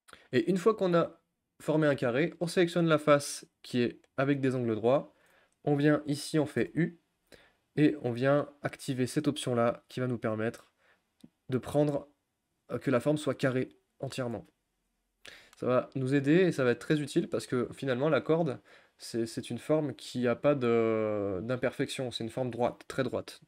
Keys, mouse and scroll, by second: 0.0 shift+w, 1.8-2.4 drag, 17.8-19.3 drag, 20.3 g.